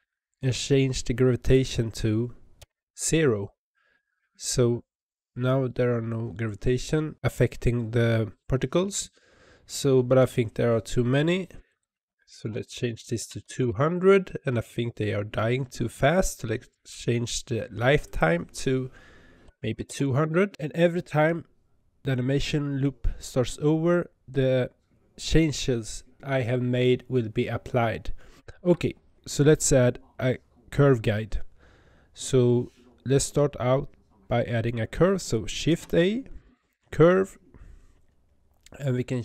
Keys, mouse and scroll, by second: 1.5-4.6 drag, 6.2-7.1 scroll up 21, 11.7-13.6 drag, 13.6 KP_0, 18.1-19.8 drag, 19.8 KP_0, 35.7 shift+a.